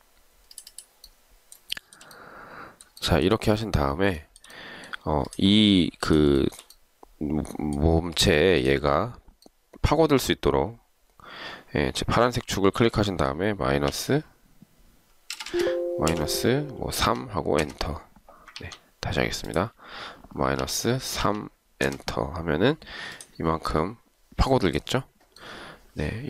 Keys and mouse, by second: 1.9 shift+right click, 3.2 shift+right click, 4.4 shift+right click, 6.5 shift+right click, 14.0 0, 15.7 BackSpace, 16.0 0, 17.4 3, 17.7 Return, 18.7 ctrl+z, 20.8 -, 21.3 3, 22.0 Return.